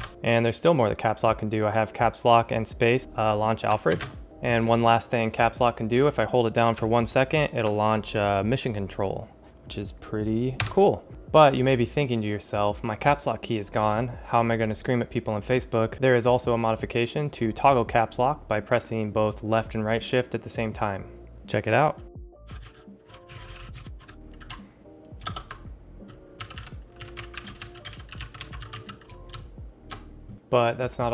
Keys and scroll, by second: 22.3-24.2 typing, 26.1-29.2 typing, 30.3 ctrl+alt+shift+super++.